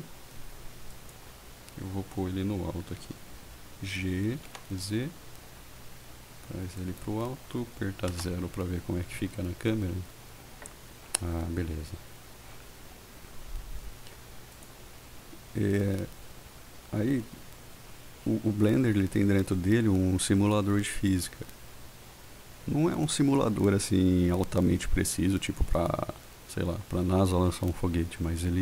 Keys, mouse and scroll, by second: 0.9 click, 3.1 g, 4.5 z, 6.9 click, 8.2 KP_0.